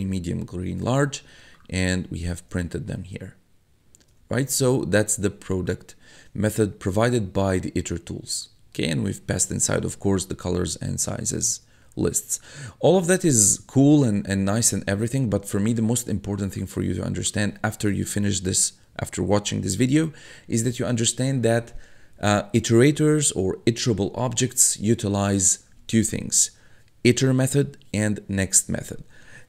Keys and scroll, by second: 1.0 1, 2.5 1, 4.4 1, 6.5 1, 11.6 1.